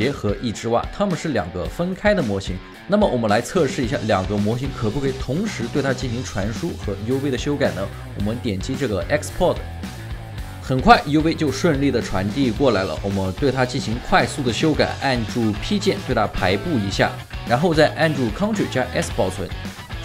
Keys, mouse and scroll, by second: 10.4 scroll down 1, 11.2 alt+middle click, 11.5 alt+right click, 19.1 ctrl+s.